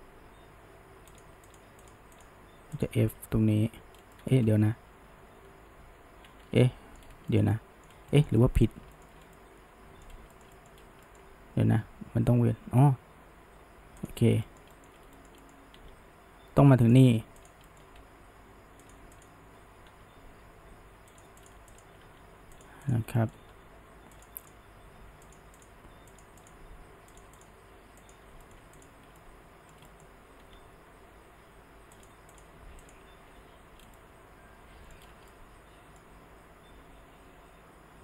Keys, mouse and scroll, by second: 1.5 click, 1.9 shift+click, 2.2 shift+click, 2.8 shift+click, 3.3 f, 3.9 scroll down 1, 4.2 middle click, 4.5 ctrl+z, 4.8 ctrl+z, 5.1 ctrl+z, 5.3 ctrl+z, 5.4 ctrl+z, 5.9 ctrl+z, 6.2 ctrl+z, 6.3 ctrl+z, 6.6-7.0 middle drag, 7.0 scroll up 1, 7.3-7.9 shift+middle drag, 7.9 scroll down 1, 8.1-9.2 shift+middle drag, 9.2 scroll down 1, 9.4-10.1 middle drag, 10.1 scroll up 1, 10.3-10.8 shift+middle drag, 10.8 scroll up 1, 11.1-14.0 shift+middle drag, 14.0 drag, 14.4 shift+middle click, 14.9 scroll up 1, 15.1-15.8 shift+middle drag, 15.8 f, 17.4 click, 17.7 middle click, 18.0 g, 19.2 click, 19.9 f, 21.4 click, 21.7 shift+click, 22.1 f, 22.6 click, 22.9 click, 23.2 middle click, 23.5 g, 24.5 click, 24.6 g, 25.6 click, 25.8 g, 26.4 click, 26.6 g, 27.4 click, 27.8 g, 28.4 shift+middle click, 28.8 click, 29.2-30.5 shift+middle drag, 30.5 f, 32.4 click, 32.9 shift+click, 33.4 f, 33.8 scroll down 1, 34.0-35.0 middle drag, 35.0 scroll up 1, 35.3-38.0 middle drag.